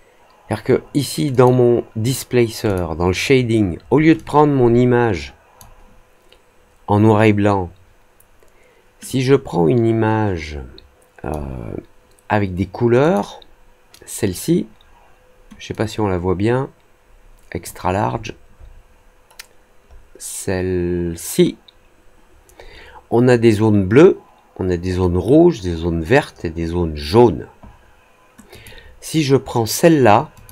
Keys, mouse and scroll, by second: 1.2 click, 2.6 click, 4.1-5.5 drag, 9.0-11.2 drag, 12.9 click, 15.6-17.6 drag, 18.1-19.1 scroll down 3, 20.4 scroll up 1, 28.4 click, 30.3 click.